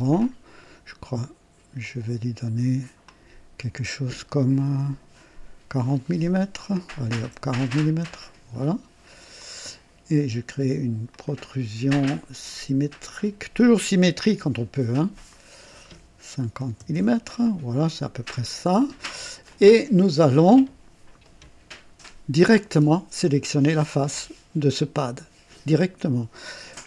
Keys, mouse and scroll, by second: 0.2 click, 0.6 right click, 1.8 click, 3.0 click, 7.0 KP_4, 7.1 KP_0, 7.8 KP_Enter, 9.4 click, 11.1 click, 13.0 click, 15.3 click, 16.4 KP_5, 16.7 Return, 18.7 click, 19.5-20.8 drag, 19.8 typing, 22.4 click.